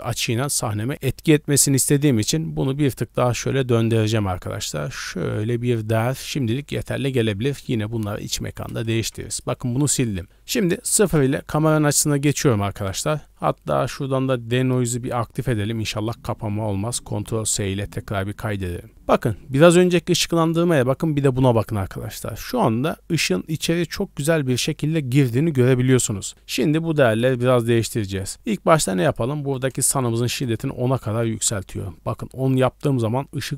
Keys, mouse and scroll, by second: 0.0-0.4 d, 0.4 right click, 0.8 d, 0.9-1.9 middle drag, 2.6-6.1 drag, 6.1 middle click, 10.9 KP_0, 12.1 scroll up 1, 13.5-14.6 scroll up 2, 14.6 click, 17.4 ctrl+s, 27.3-27.9 scroll down 2, 27.6 middle click, 28.0 scroll up 1, 29.0-30.3 drag, 29.0-29.7 scroll up 1.